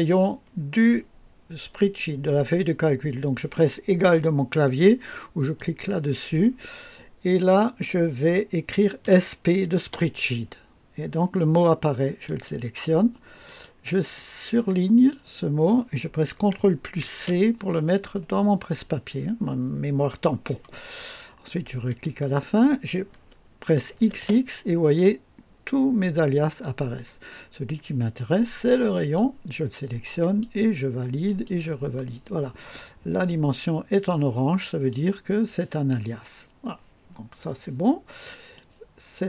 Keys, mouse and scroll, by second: 5.6 click, 9.0-9.9 typing, 12.3 click, 13.5 click, 14.2 click, 17.1 ctrl+c, 21.9 click, 24.0 typing, 29.0 click, 30.2 click, 31.3 click, 33.3-35.1 drag, 38.5-39.2 drag.